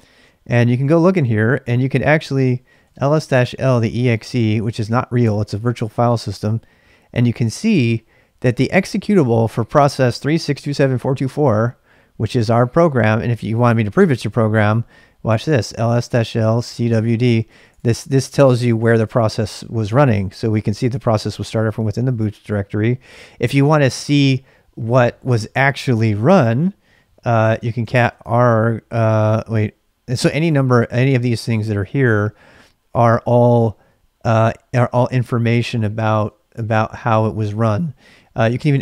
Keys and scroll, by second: 2.6-5.2 typing, 15.2-19.3 typing, 27.0-31.9 typing.